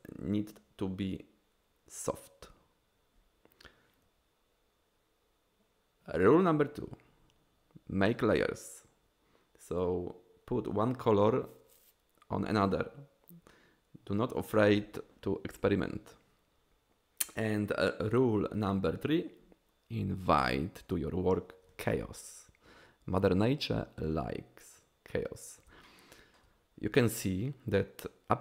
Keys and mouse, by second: 26.0-26.4 shift+middle drag.